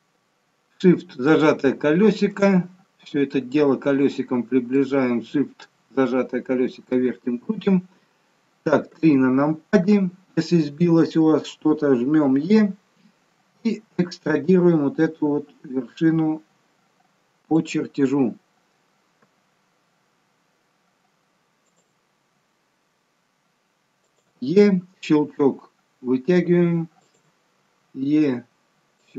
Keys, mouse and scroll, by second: 2.4 scroll up 2, 3.1-3.6 scroll up 2, 4.6 shift+middle click, 8.9 KP_3, 12.2 e, 19.1 e, 22.0 e, 25.3 e, 27.5 e.